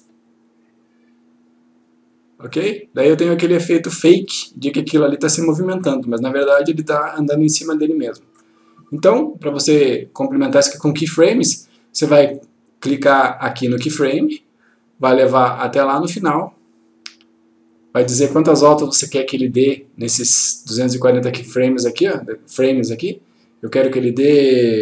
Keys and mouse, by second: 14.0 click, 15.8-18.0 click, 23.8 click.